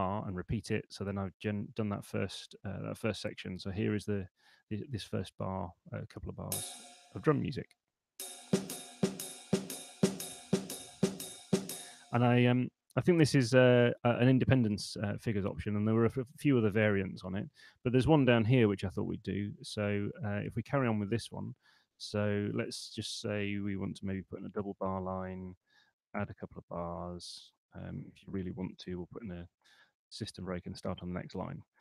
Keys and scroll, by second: 7.2 p, 11.6 space, 24.3 shift+b, 24.6 Return, 25.6-26.5 typing, 28.4 super+3, 28.9 shift+s, 30.4 super+2.